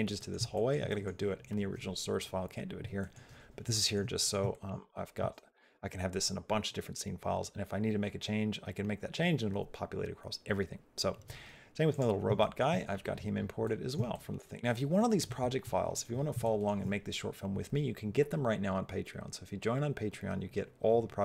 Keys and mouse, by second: 0.0 middle click, 0.3 shift+middle click, 0.7 middle click, 2.8 middle click, 3.5 shift+middle click, 3.9 middle click, 4.3 shift+middle click, 11.8 click, 12.2 shift+middle click, 13.4 middle click, 13.9 shift+middle click, 14.5 shift+middle click, 16.2 shift+middle click.